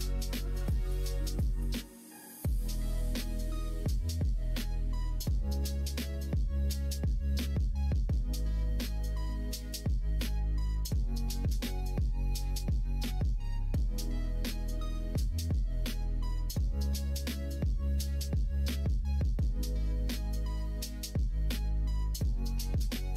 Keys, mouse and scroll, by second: 0.3 ctrl+click, 1.0 s, 4.1 2, 4.9 click, 5.7 click, 6.5 g, 9.7 click, 10.5 3, 10.8 click, 12.6 ctrl+b, 16.1 click, 16.3 Tab, 16.7 click, 17.1 middle click, 18.2 middle click, 19.0 middle click, 19.6 middle click, 20.2 middle click, 21.2-22.5 middle drag, 23.0 click.